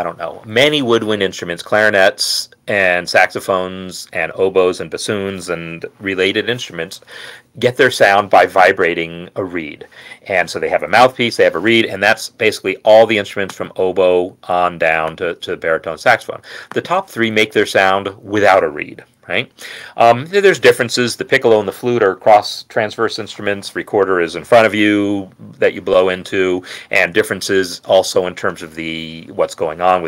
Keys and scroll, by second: 17.8 Down, 18.1 Down.